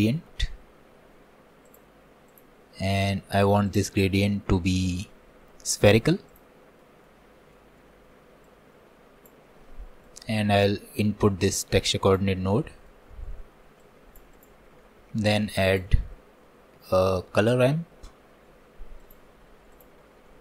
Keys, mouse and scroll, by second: 4.0-8.5 drag, 8.5-12.2 middle drag, 12.2-20.4 drag.